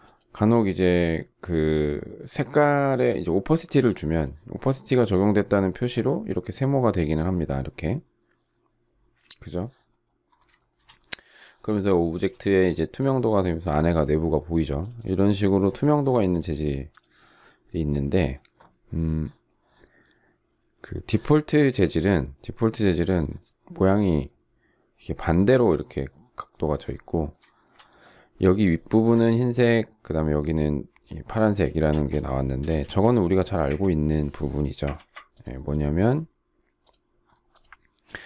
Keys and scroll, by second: 12.1 space, 32.6 space, 33.6 Delete.